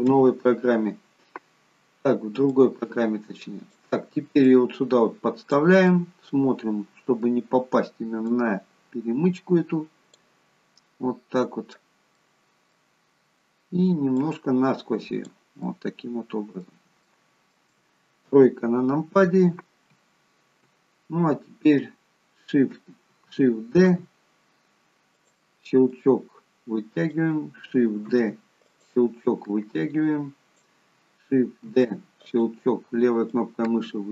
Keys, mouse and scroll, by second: 0.0 KP_3, 2.5 click, 4.4 click, 5.8 middle click, 8.2 click, 10.7 middle click, 12.0 middle click, 14.1 click, 15.5 middle click, 17.0 shift+middle click, 18.2 KP_3, 23.7 shift+d, 25.9 click, 28.0 shift+d, 29.1 click, 31.6 shift+d, 33.3 click.